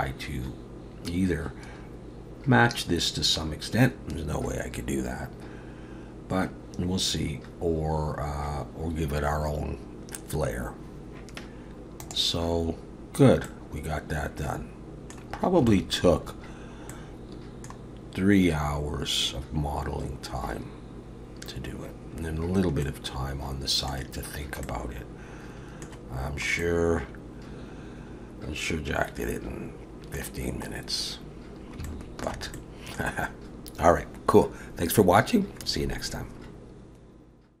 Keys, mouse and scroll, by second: 13.6 middle click, 15.3-15.7 scroll down 3, 15.7 shift+middle click, 16.3 scroll up 2, 16.9 middle click, 21.1-21.9 scroll up 1, 21.9-22.8 scroll down 1, 22.8 middle click, 24.6 middle click, 26.6 middle click, 30.8-31.4 scroll up 1, 31.9 shift+middle click, 32.6 middle click.